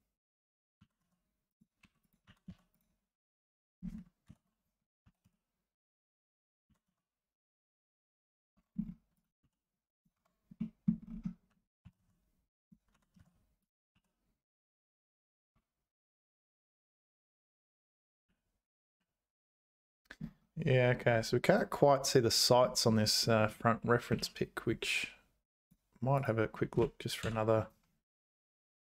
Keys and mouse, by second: 0.8 g, 1.8 2, 2.2 g, 4.3 ctrl+l, 5.0 s, 6.7 g, 8.5 Tab, 9.4 h, 10.2 Tab, 10.6 middle click, 11.8 s, 12.9 g, 13.9 e, 15.5 `, 18.3 z.